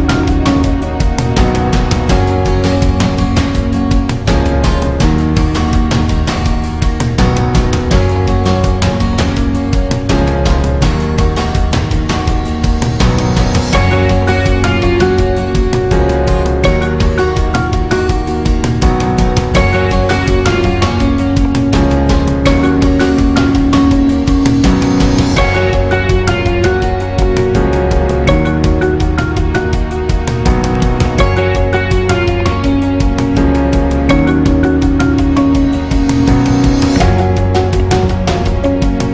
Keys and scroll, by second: 28.0 alt+shift+?, 30.9 super+æ, 34.1 ctrl+alt+ø, 34.7 alt+shift+ý, 34.9 alt+shift+û, 35.0 alt+shift+ĥ, 35.6 ctrl+alt+ç, 35.9 alt+shift+ß, 36.2 alt+shift+ý, 36.3 alt+shift+à, 36.9 alt+shift+´, 37.7 ctrl+alt+ö, 37.9 alt+shift+õ, 38.1 alt+shift+ï, 38.3 alt+shift+×, 38.4 alt+shift+ğ.